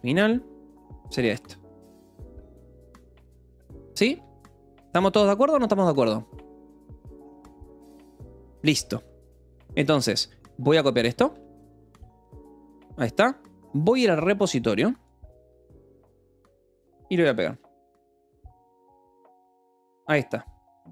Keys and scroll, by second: 0.0-0.5 typing, 0.8 Escape, 1.7 ctrl+s, 2.7 j, 3.0 k, 3.9 a, 4.1 Return, 4.4 Escape, 5.3 ctrl+s, 8.9 j, 10.6-12.7 typing, 17.7 Return.